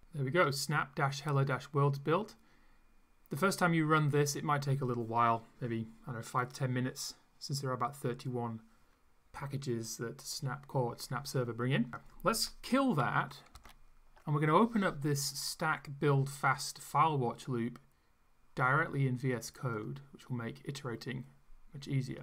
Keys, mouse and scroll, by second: 11.9 click, 13.5 ctrl+c, 19.7 click.